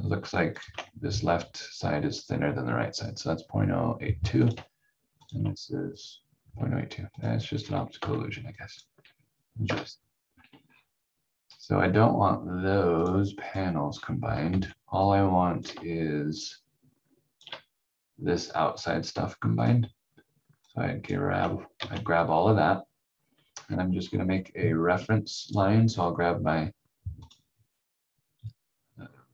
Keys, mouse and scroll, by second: 0.5 ctrl+click, 4.4 click, 5.2 ctrl+click, 7.5-8.0 scroll down 1, 8.0 v, 8.6 click, 9.6 Delete, 10.6 scroll down 1, 11.5 click, 13.8 scroll down 1, 14.5 v, 15.1 click, 16.3 shift+click, 21.7 ctrl+z, 23.6 scroll up 1, 25.4 click, 25.8-26.2 scroll up 1, 27.2 click.